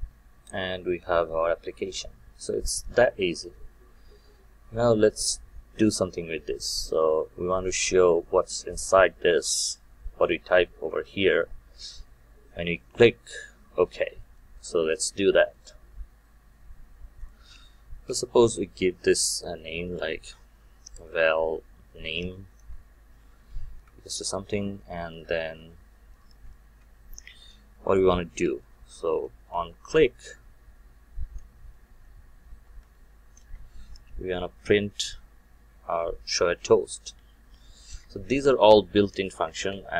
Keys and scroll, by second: 33.3 Return, 38.1 Return, 39.5 alt+Return.